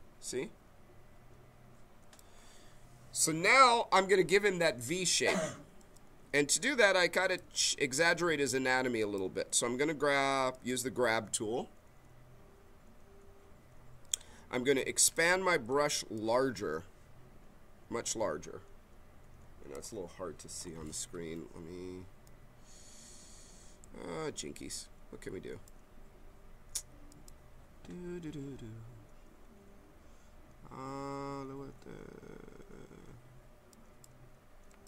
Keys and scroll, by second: 15.6 b.